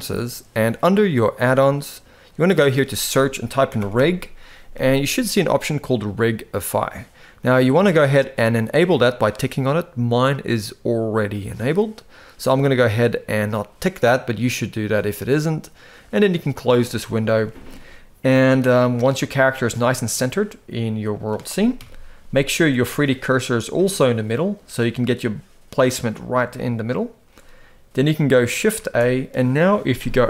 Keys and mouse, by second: 19.5-21.0 middle drag, 21.5 KP_1, 22.1-22.4 shift+middle drag, 26.3-26.9 shift+middle drag, 28.5 shift+a.